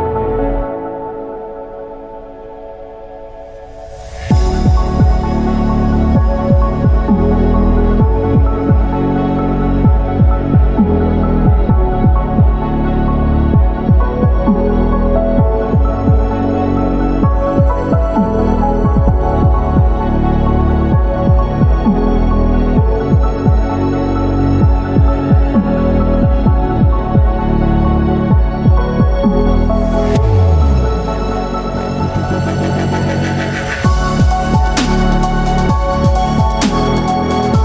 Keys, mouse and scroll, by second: 0.7 s, 3.8 click, 5.5 ctrl+r, 13.3 click, 14.8-15.2 scroll up 1, 16.2 scroll up 2, 16.7 ctrl+r, 18.9 click, 19.3 ctrl+r, 22.2 click, 22.8 ctrl+r, 23.8 right click, 24.7 s, 25.1 shift+z, 27.2 click, 27.9-28.9 shift+middle drag, 28.9 shift+scroll down 1, 30.4 ctrl+r, 31.8 right click, 32.6 s, 33.1 shift+z, 35.2 click, 35.7 scroll down 2, 36.1-36.7 shift+middle drag.